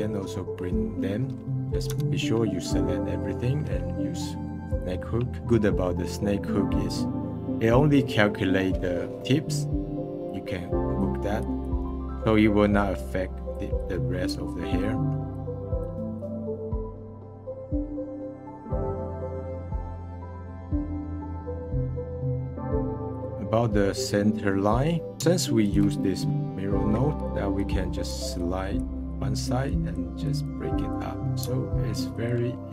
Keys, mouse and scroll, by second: 1.2-1.9 middle drag, 1.9 a, 4.6 click, 5.4-7.1 middle drag, 10.2-14.6 drag, 14.6 middle click, 15.3-16.6 drag, 16.6 middle click, 16.7 click, 17.4 middle drag, 17.7 scroll down 1, 17.8 middle click, 18.0 click, 18.5 middle click, 18.8 f, 18.9 click, 19.1 middle click, 19.3 click, 20.2 middle click, 20.3 click, 20.7 f, 20.8 f, 20.9 f, 20.9 click, 21.4 ctrl+z, 21.4 ctrl+z, 21.5 ctrl+z, 21.7 ctrl+z, 21.9-23.2 drag, 25.2 f, 25.7 f, 27.2-31.4 drag, 31.4 f, 32.2 f.